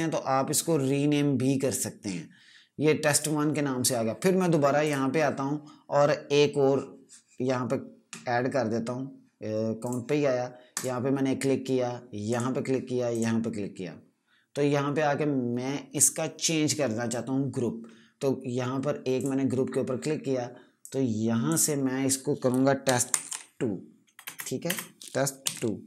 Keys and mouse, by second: 3.0 click, 9.7 click, 19.1 click, 22.5-24.1 typing, 25.3-25.8 typing.